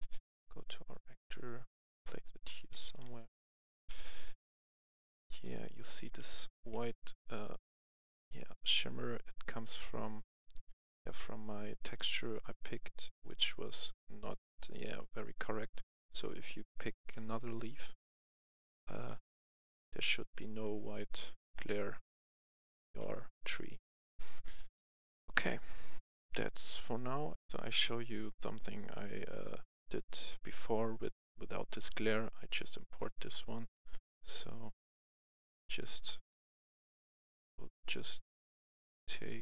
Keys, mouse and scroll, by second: 2.5 right click, 2.7 w, 3.5 w, 3.8 w, 3.9 w, 5.1-7.1 typing, 11.1-15.1 right drag, 15.1-16.3 right drag, 16.3-18.6 typing, 19.9 typing, 21.6-22.8 typing, 24.6 typing, 25.8-26.6 typing, 26.4 right click, 27.3 F11, 27.4 F10, 31.5 right click, 33.2 click, 34.5 click, 37.6-38.2 scroll down 1, 39.1 click.